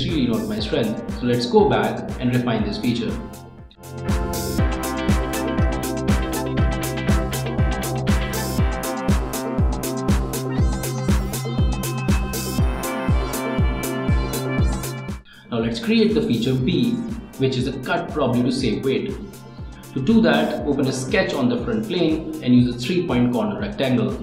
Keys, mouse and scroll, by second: 0.5 click, 2.2-3.7 drag, 3.7 click, 4.0 scroll down 1, 4.2 click, 5.0 click, 5.6 click, 6.4 click, 6.9 click, 7.5 click, 8.2 click, 8.4 middle click, 8.5 scroll up 1, 8.6 scroll down 1, 8.7 click, 8.9 click, 9.2 right click, 9.3 scroll down 1, 9.6 click, 10.0 click, 10.3-11.5 drag, 11.9 click, 12.7 click, 13.4 click, 13.4 scroll up 1, 13.5 scroll down 1, 13.7 click, 14.0-15.0 middle drag, 15.1 ctrl+s, 21.5 right click.